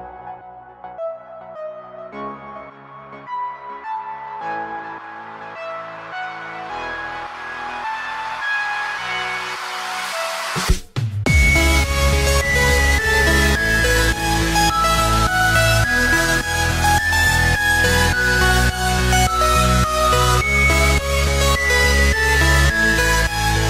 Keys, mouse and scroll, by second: 0.2-3.0 drag, 3.0 s, 8.0-9.1 scroll down 1, 9.9-11.6 drag, 11.6 s, 13.5 click, 14.6-17.5 drag, 18.3 s, 21.0 click, 22.1-23.6 drag.